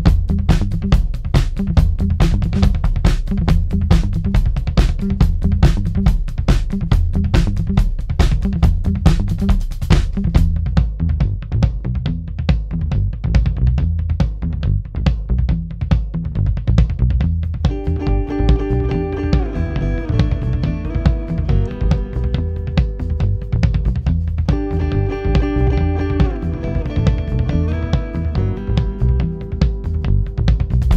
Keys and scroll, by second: 0.2 F1, 0.9 F2, 2.0 3, 6.2 ,, 15.5 4, 19.3 3, 21.0 4, 23.2 F9, 23.9 2, 25.3 ctrl+d, 25.4 Escape, 26.2 Escape.